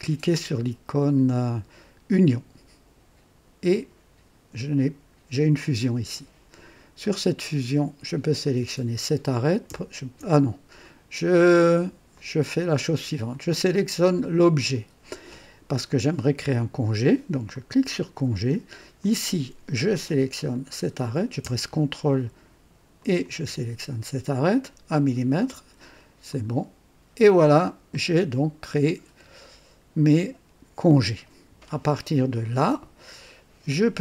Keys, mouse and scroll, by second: 2.1 click, 7.0 click, 8.4 click, 10.8 ctrl+click, 11.5 ctrl+click, 12.1 ctrl+click, 13.3 click, 17.5 click, 18.9 click, 20.5 click, 23.0 ctrl+click, 26.2 click, 27.9-32.2 drag, 33.9-34.0 drag.